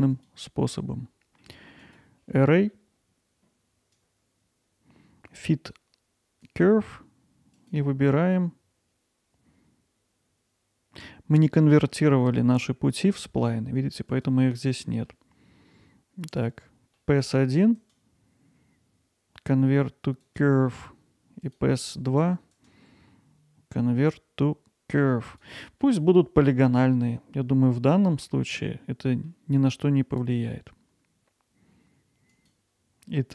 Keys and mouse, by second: 0.1-2.0 drag, 3.9-6.6 drag, 7.6-14.1 drag, 14.6-15.1 middle drag, 17.0 middle drag, 17.8-20.4 right drag, 21.4 click, 22.6-25.4 right drag, 25.8-29.3 middle drag, 32.3 click.